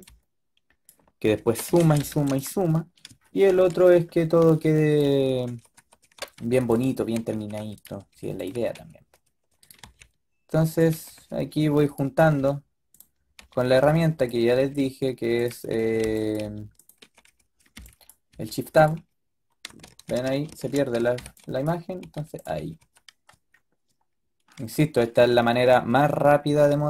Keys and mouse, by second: 1.2 s, 4.3 s, 5.3-9.7 typing, 10.8 a, 11.1 a, 11.5 a, 12.3 g, 13.8-18.9 typing, 19.7 ctrl+z, 20.4 ctrl+z, 20.9-22.7 typing.